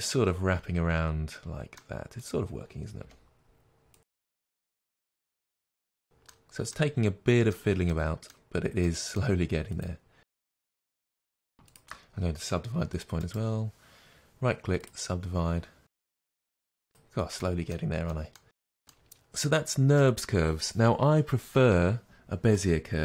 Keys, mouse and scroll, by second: 2.2 click, 3.0 g, 3.9 click, 4.0-5.2 middle drag, 5.2 shift+click, 5.5 g, 5.8 click, 5.9-9.7 middle drag, 9.7 click, 10.2 g, 10.5 click, 10.6 middle click, 10.9 g, 11.1 click, 11.6 shift+click, 14.8-16.0 right drag, 16.0 click, 16.1 middle click, 16.3-18.0 typing, 16.5 click, 16.8 click, 17.0 middle click, 17.4 click, 17.6 middle click, 17.9 click, 18.1 click, 18.2-23.0 middle drag, 18.4 scroll down 2, 19.0-19.4 scroll down 2.